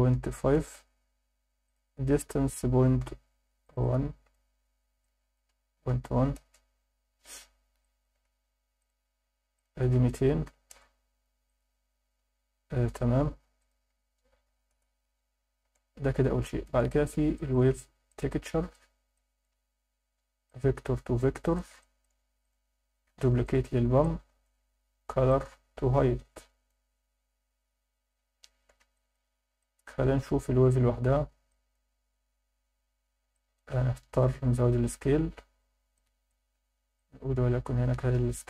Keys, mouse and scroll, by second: 1.6-6.4 drag, 7.8 alt+shift+middle click, 8.8 click, 9.6-10.7 drag, 10.4 0, 11.4-12.9 drag, 13.6-14.7 drag, 15.6 alt+a, 15.9 scroll down 2, 16.4 alt+shift+middle click, 17.4 shift+middle click, 18.1 click, 19.1 alt+shift+middle click, 20.5-21.6 drag, 21.8 alt+shift+middle click, 22.4 click, 23.1 shift+d, 23.4 click, 24.0 alt+shift+middle click, 24.4 alt+shift+click, 25.3 click, 26.1 click, 29.0 click, 29.6 alt+shift+middle click, 31.5 drag, 33.3 alt+shift+middle click, 36.0 click, 36.9-38.4 drag.